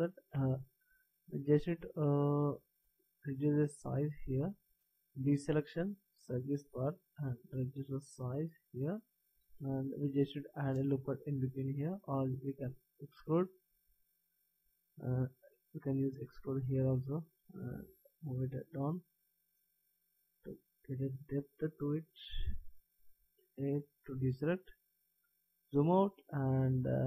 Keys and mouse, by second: 2.8 b, 3.8 v, 5.0 b, 7.1 s, 12.6 ctrl+z, 15.5 e, 17.5 s, 20.0 click, 23.5 a, 23.7-25.2 middle drag.